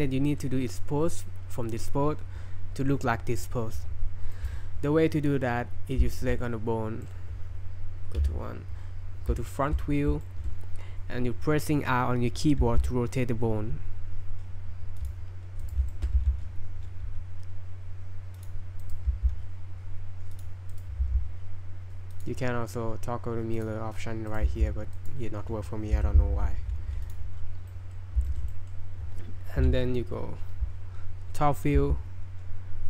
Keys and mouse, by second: 4.3 click, 6.1 shift+middle drag, 8.2 KP_1, 9.5 shift+middle drag, 10.2 shift+middle drag, 12.6 r, 15.6 click, 15.9 shift+drag, 16.2 r, 18.8 right click, 19.1 r, 20.7 right click, 21.0 r, 23.6 click, 24.3 right click, 24.5 r, 27.1 drag, 27.7 click, 27.7 middle drag, 28.2 shift+middle drag, 28.5 middle drag, 30.4 KP_7, 31.8 r.